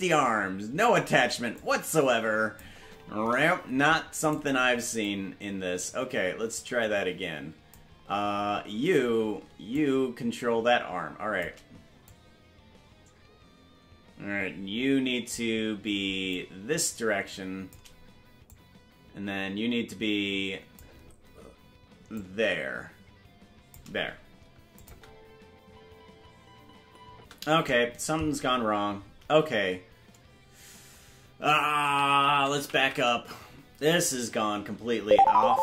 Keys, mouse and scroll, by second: 1.5-2.6 drag, 2.7 space, 4.3 right click, 5.0-7.7 drag, 9.7-11.4 shift+drag, 12.0-15.3 drag, 16.3-17.7 shift+drag, 18.4-20.8 drag, 22.1-23.7 shift+drag, 24.7-27.3 drag, 24.9 space, 27.1 space, 32.4 ctrl+z.